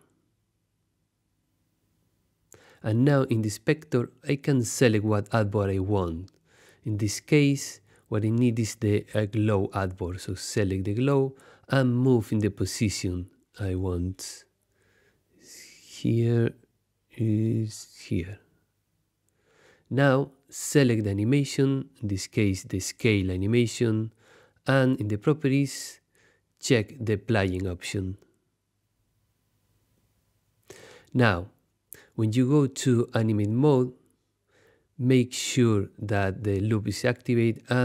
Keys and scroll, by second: 33.2 super+Tab.